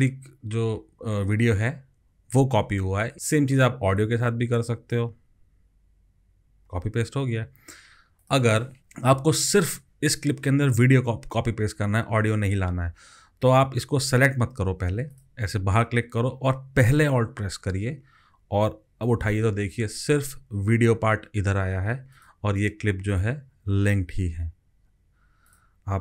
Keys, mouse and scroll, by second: 4.0 alt+click, 8.8 ctrl+z, 18.6 alt+click, 22.6 double click.